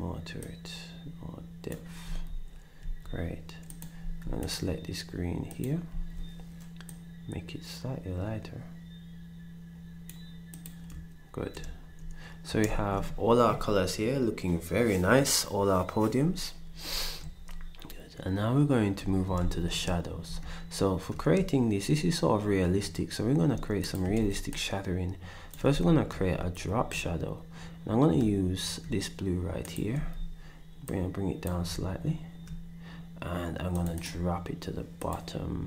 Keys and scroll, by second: 2.0 d, 2.8 s, 4.0 d, 5.9 s, 12.7 ctrl+shift+s, 19.4 ctrl+s, 24.2 ctrl+d, 25.7 d, 29.9 d.